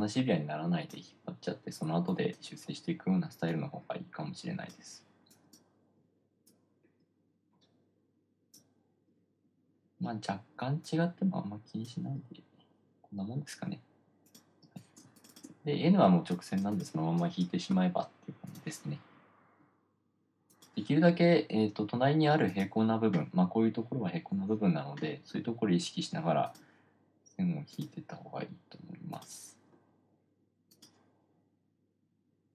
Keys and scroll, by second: 15.0 space.